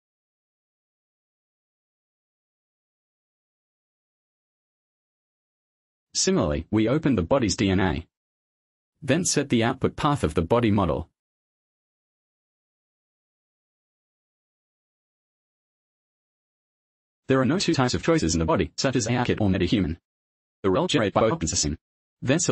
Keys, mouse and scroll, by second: 0.1 click, 2.0 click, 4.4 click, 5.7 click, 6.5 click, 7.6 click, 8.0 click, 9.6 click, 10.1 click, 11.2 click, 12.1 click, 12.7 click, 13.7 shift+b, 14.9-15.8 typing, 16.0 Return, 16.3 Return, 18.0 click, 21.4 click.